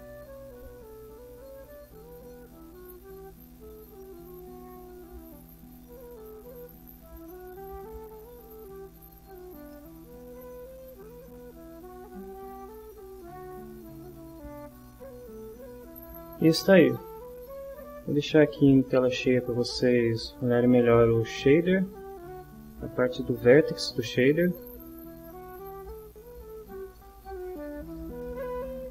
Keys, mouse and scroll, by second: 1.1-2.6 drag, 3.2-4.7 drag, 6.1-8.5 drag, 9.7 middle click, 11.7-12.8 drag, 13.2-15.6 middle drag, 17.5 middle click, 18.3-20.8 drag, 22.1-22.7 ctrl+scroll up 1, 23.4-26.1 drag.